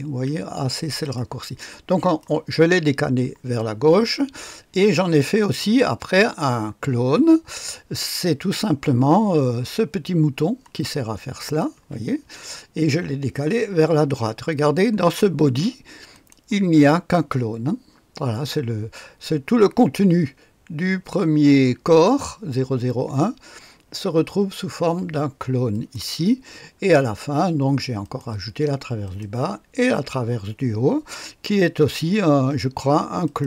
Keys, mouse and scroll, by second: 1.0-2.7 drag, 3.5-4.7 drag, 5.8-8.9 scroll down 1, 11.4 click, 11.7 space, 16.1 click, 25.7 click, 26.5-27.5 scroll down 1, 27.5-28.0 scroll down 1, 28.0 click, 28.4-29.3 typing, 29.0 click, 33.2 click.